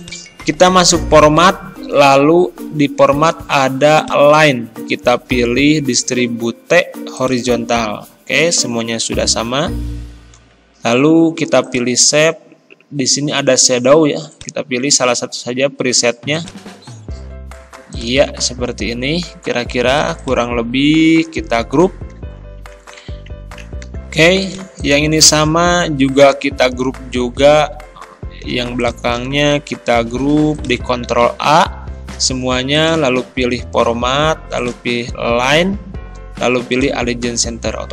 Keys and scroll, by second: 22.2 ctrl+g, 27.6 ctrl+g, 29.8 ctrl+g, 31.3 a.